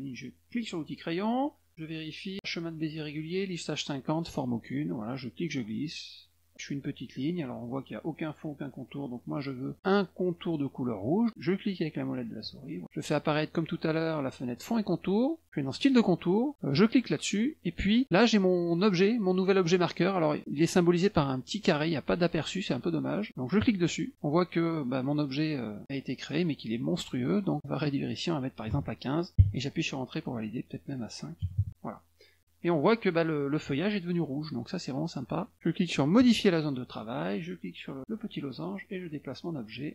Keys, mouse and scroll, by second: 0.6 click, 5.2-6.2 drag, 11.9 middle click, 14.5 click, 15.8 click, 16.7 click, 23.6 click, 27.5 click, 30.7 click, 36.2 click, 38.1-39.2 drag, 39.8 click.